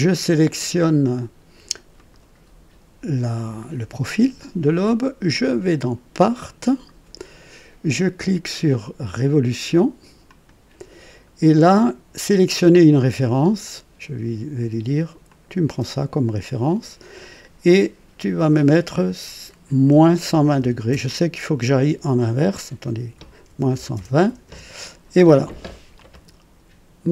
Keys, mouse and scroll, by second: 1.9 click, 5.3 click, 6.4 click, 10.2 click, 12.9 click, 15.2 click, 17.7 click, 19.9 -, 20.2 KP_1, 20.5 KP_2, 20.9 KP_0, 23.4 alt+KP_1, 23.7 alt+KP_2, 23.9 alt+KP_0, 24.4 Return, 25.9-27.1 drag.